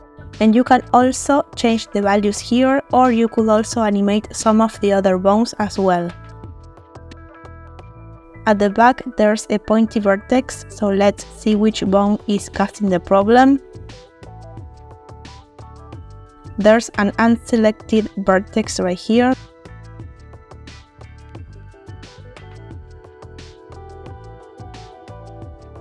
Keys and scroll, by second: 5.1 r, 7.6 Escape, 8.2 space, 11.4 space.